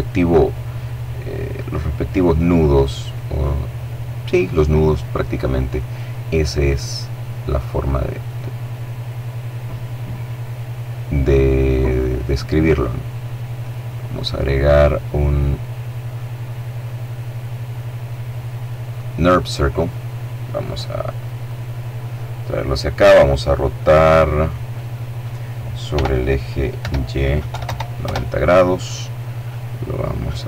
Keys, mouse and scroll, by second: 18.2 click, 20.5-21.9 drag, 23.8-24.8 middle drag, 25.0 r, 25.8 y, 26.5 KP_9, 26.7 KP_0, 27.0 KP_Enter, 29.0-30.4 drag.